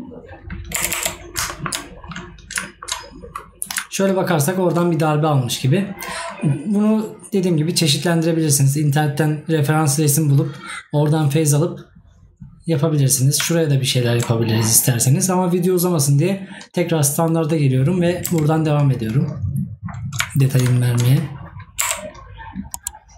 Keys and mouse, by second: 1.5 right click, 20.8 right click.